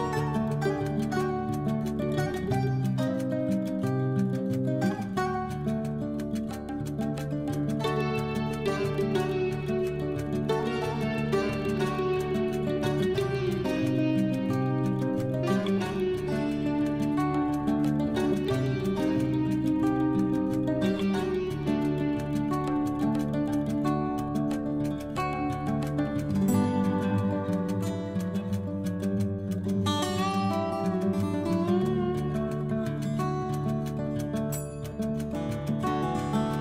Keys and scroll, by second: 2.2 ctrl+z, 19.0 9, 19.3 0, 19.6 Return.